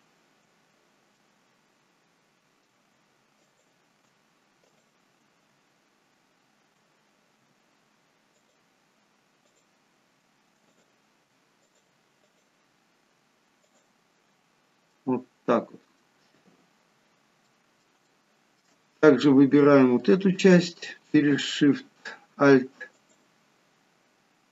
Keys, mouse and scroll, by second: 0.4 scroll up 1, 1.1 middle click, 3.4 alt+shift+click, 4.6 click, 6.9-7.3 scroll down 1, 8.4 alt+shift+click, 10.7 click, 11.6 alt+shift+click, 13.6 click, 14.4-14.8 scroll down 3, 14.8 middle click, 17.5 middle click, 18.0 shift+middle click, 18.8-19.6 scroll up 2, 19.6 middle click, 22.9 alt+shift+click.